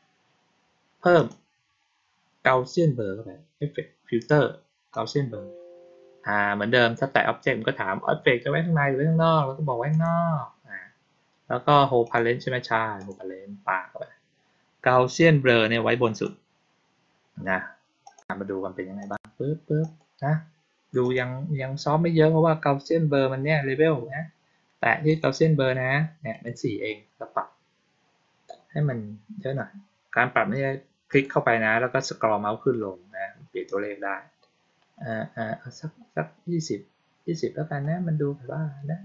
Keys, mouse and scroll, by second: 1.1 click, 4.8 click, 9.8 click, 12.0 click, 12.9 click, 15.1-16.1 drag, 18.0 click, 18.9 click, 19.7 click, 20.9 click, 25.0 click, 26.2 click, 27.2-28.5 scroll up 2, 28.5-29.9 scroll up 1, 31.0 click, 31.7-32.7 scroll up 2, 32.7 scroll down 2, 33.0 scroll up 2, 33.1 scroll down 2, 33.3 scroll up 2, 33.4 scroll down 2, 33.6-34.5 scroll up 2, 34.5-35.1 scroll down 1, 35.4-37.2 scroll up 1, 37.2-37.6 scroll down 1.